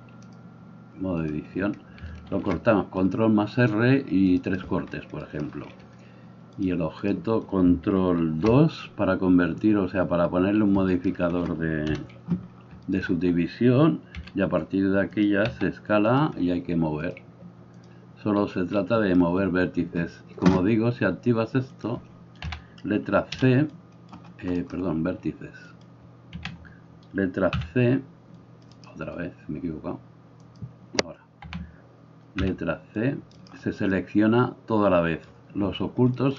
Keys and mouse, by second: 2.3 ctrl+r, 4.6-6.7 middle drag, 6.7-15.3 drag, 8.2 ctrl+2, 11.9 KP_1, 14.2 r, 15.3-17.2 middle drag, 15.4 s, 17.2-26.0 drag, 22.5 a, 23.4 c, 26.0-30.5 middle drag, 26.4 a, 27.6 c, 30.5-33.5 drag, 31.5 a, 32.4 c, 33.5-36.3 middle drag.